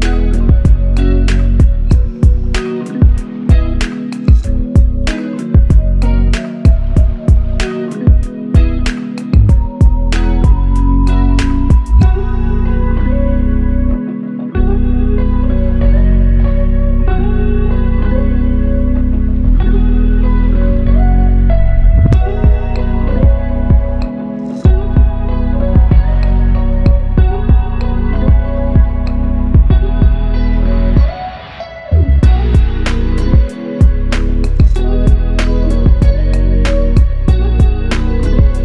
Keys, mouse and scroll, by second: 5.7 shift+click, 6.9 shift+click, 7.3 alt+shift+click, 8.4 shift+click, 10.5 double click, 11.4 shift+click, 13.3 alt+shift+click, 14.1 ctrl+alt+click, 15.2 alt+click, 16.1 double click, 19.5 shift+click, 21.5 double click, 23.9 shift+click, 27.8 f, 30.4 double click.